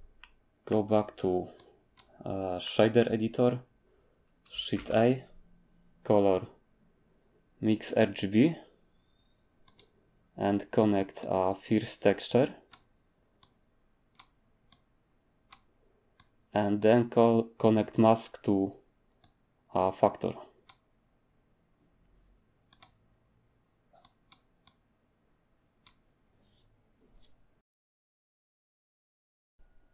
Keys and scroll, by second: 4.7 a.